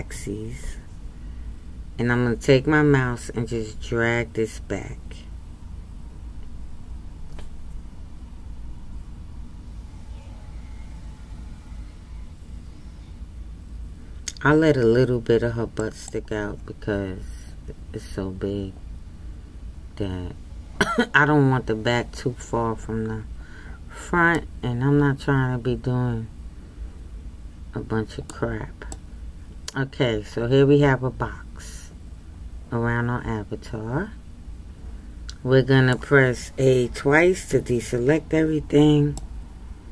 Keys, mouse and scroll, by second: 24.3-27.3 middle drag, 28.9-31.9 middle drag, 37.5 a, 37.7 a, 39.2-39.9 middle drag.